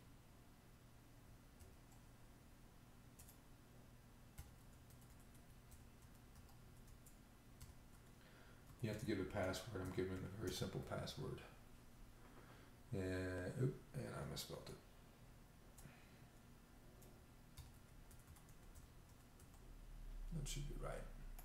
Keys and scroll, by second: 1.6 typing, 4.5-6.3 typing, 7.4-10.7 typing, 17.6-19.3 typing.